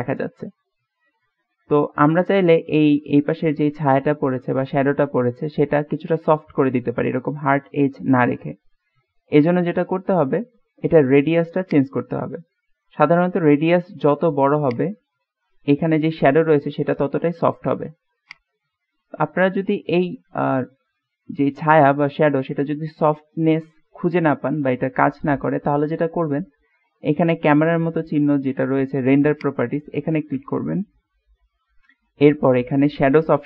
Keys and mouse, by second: 1.2-1.9 middle drag, 2.1-2.6 middle drag, 11.9-13.0 drag, 13.7 middle click, 14.7 click, 18.4-19.9 middle drag, 21.0 middle click, 29.5 middle click.